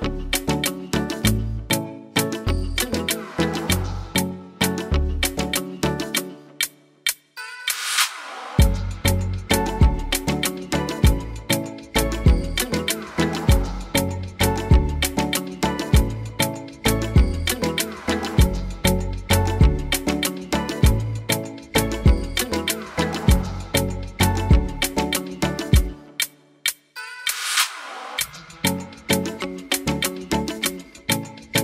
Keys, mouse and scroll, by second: 0.3 click, 4.3 middle click, 6.3 click, 7.2 g, 9.3 r, 10.5 click, 11.2 r, 13.1 g, 17.3 g, 18.6 ctrl+z, 18.9 ctrl+z, 19.6 g, 22.7 r, 24.0 g, 27.3 g, 29.1 g, 31.2-31.6 scroll down 5, 31.5 shift+middle click.